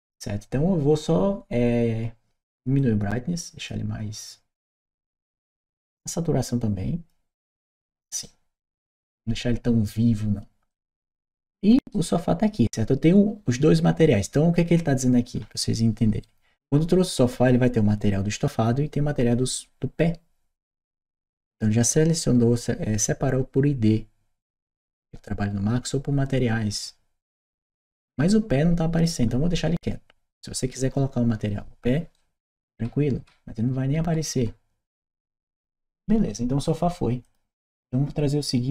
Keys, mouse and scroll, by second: 2.6-4.5 drag, 5.5-7.6 drag, 8.0 right click, 10.5 click, 11.1 right click, 31.9-35.4 right drag, 37.0 click.